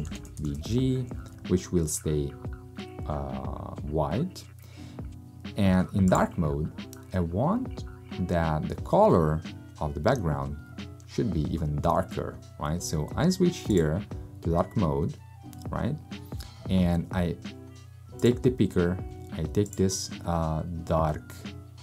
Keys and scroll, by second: 0.0-1.1 typing.